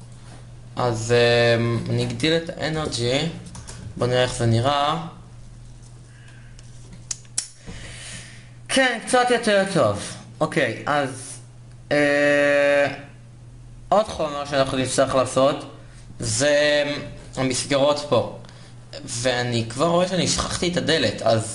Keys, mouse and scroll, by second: 5.1 KP_0, 5.4 shift+z.